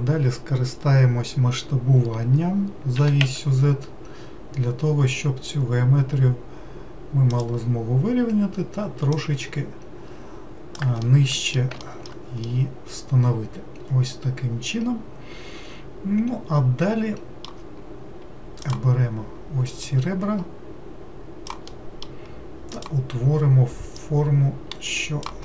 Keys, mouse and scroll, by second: 3.0 s, 9.1 click, 11.0 alt+middle click, 11.8 alt+middle click, 12.5-15.6 middle drag, 18.6 click, 19.8 click, 21.7-22.7 middle drag, 22.7 click, 24.0 click.